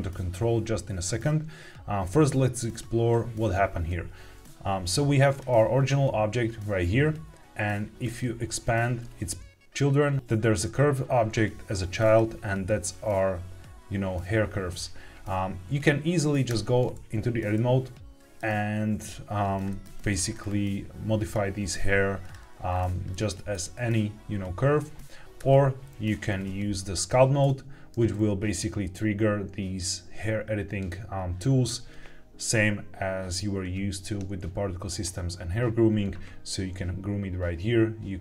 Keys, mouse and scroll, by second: 5.2 click, 7.9 click, 11.9 click, 16.5 Tab, 17.4 middle click, 19.6 shift+middle click, 20.0-21.1 scroll up 4, 21.1 click, 22.1 click, 22.6-23.0 scroll down 3, 23.0 middle click, 25.4 Tab, 26.3 ctrl+Tab.